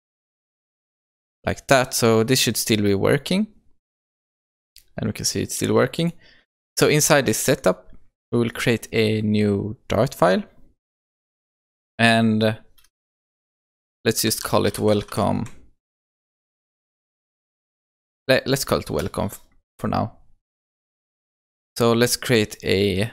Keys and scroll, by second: 6.4 shift+F10.